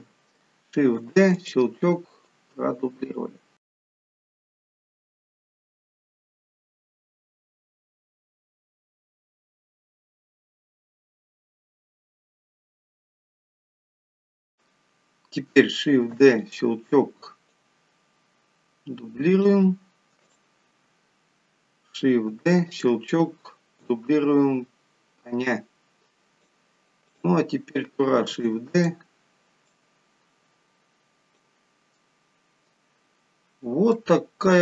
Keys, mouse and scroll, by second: 1.3 shift+d, 2.7 click, 4.5 shift+d, 5.1 click, 6.3 shift+d, 6.8 click, 8.1 shift+d, 8.8 click, 9.8 shift+d, 10.4 click, 11.6 shift+d, 12.2 click, 14.8 click, 16.5 shift+d, 17.9 click, 20.7 click, 22.7 shift+d, 24.1 click, 27.5 click, 28.7 shift+d, 30.1 click, 32.4 middle click.